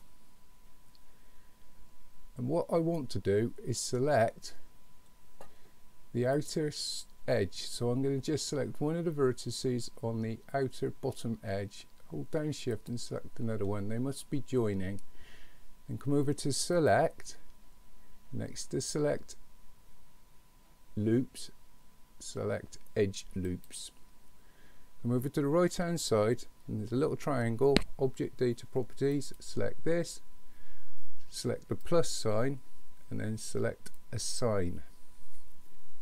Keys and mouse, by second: 0.0-4.0 middle drag, 6.4 click, 12.7 shift+click, 16.8-23.7 drag, 29.1 click, 31.8 click, 34.0 click.